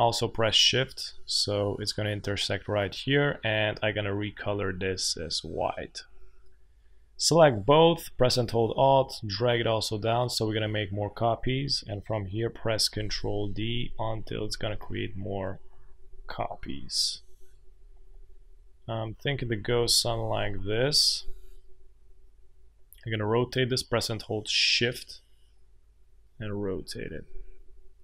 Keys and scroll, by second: 12.9 ctrl+d, 13.0 ctrl+d, 13.2 ctrl+d, 13.3 ctrl+d, 13.5 ctrl+d, 13.6 ctrl+d, 13.8 ctrl+d, 13.9 ctrl+d, 14.1 ctrl+d, 14.8 space, 16.0 ctrl+d, 16.1 ctrl+d, 17.7 ctrl+d, 17.8 ctrl+d, 18.0 ctrl+d, 18.2 ctrl+d, 19.0 ctrl+d, 19.1 ctrl+d, 19.5 ctrl+d, 19.7 ctrl+d, 19.9 ctrl+d, 20.0 ctrl+d, 20.2 ctrl+d, 20.4 ctrl+d, 20.5 ctrl+d.